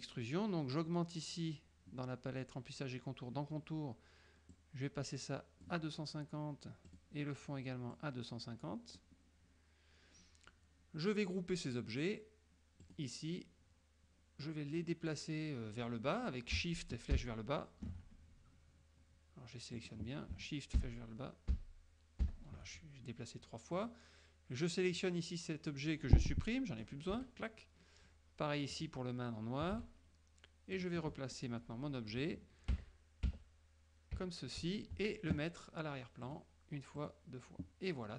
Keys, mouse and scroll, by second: 4.6-6.0 drag, 7.0 click, 8.0-9.3 drag, 12.9 click, 17.3 shift+Down, 19.8 click, 20.9 shift+Down, 21.6 shift+Down, 22.3 shift+Down, 23.8 click, 25.0-27.1 drag, 27.2 Delete, 28.8 click, 29.8 Delete, 30.8 click, 32.8 shift+Up, 34.3 shift+Up, 36.3 click, 37.1 click.